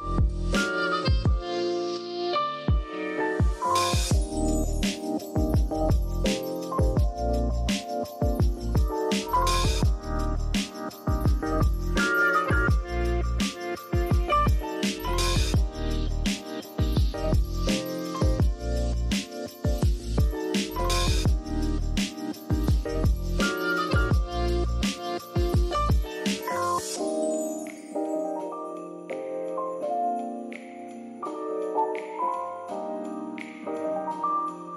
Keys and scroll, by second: 0.1 super+s, 2.2-2.6 typing, 4.2-4.9 typing, 11.0 super+z, 19.1 i, 19.6 v, 20.6 z, 22.2 p, 25.6 super+z, 25.7-26.5 typing, 31.7-33.8 typing.